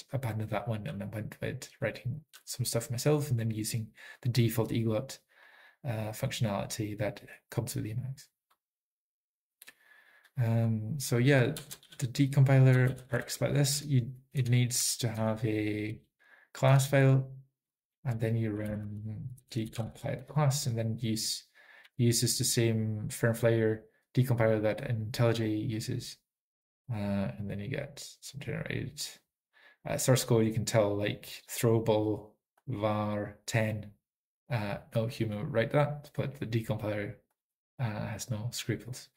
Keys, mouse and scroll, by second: 5.8 typing, 10.8-11.9 typing, 11.3 ctrl+p, 11.3 ctrl+n, 11.3 alt+f, 11.3 alt+b, 11.3 alt+x, 11.3 Return, 11.9 alt+f, 11.9 alt+b, 11.9 alt+x, 11.9 Return, 11.9 Up, 11.9 click, 13.8 Return, 13.8 typing, 14.4 Return, 15.2 Return, 18.2 alt+x, 20.8 Return, 20.8 typing, 22.4 y, 24.9 typing, 31.6 click, 32.8 click, 33.3-33.7 typing, 33.6 click, 35.1 typing, 37.4 click.